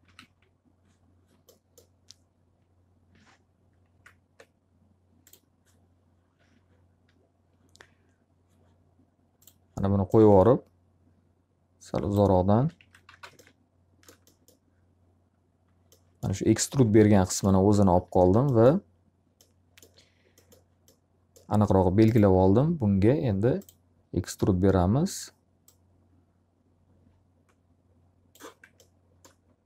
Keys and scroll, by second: 0.1 z, 3.9 ctrl+x, 12.3 x, 13.1 z, 13.3 alt+a, 17.6 q.